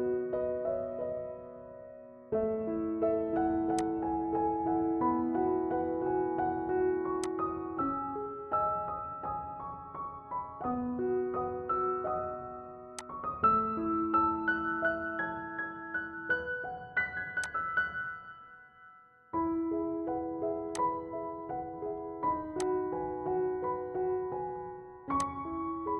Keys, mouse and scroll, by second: 3.9 click, 7.3 click, 13.0 click, 13.2 click, 17.4 click, 17.5-25.9 drag.